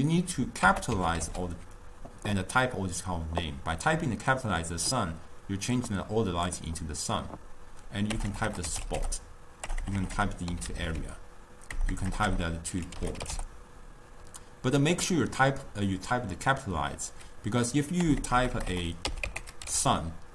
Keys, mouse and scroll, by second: 9.1 BackSpace, 9.9 BackSpace, 10.1 BackSpace, 12.0 BackSpace, 12.2 BackSpace, 18.3 BackSpace, 18.5 BackSpace, 18.8 BackSpace.